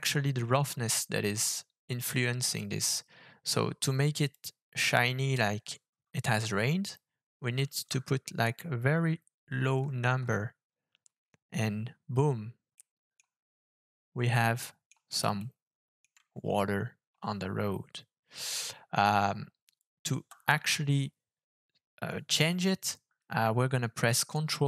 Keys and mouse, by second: 2.4-11.4 drag, 12.8-13.2 middle drag, 14.3 middle click, 15.4-16.0 shift+middle drag, 18.4 middle click, 20.2 KP_0.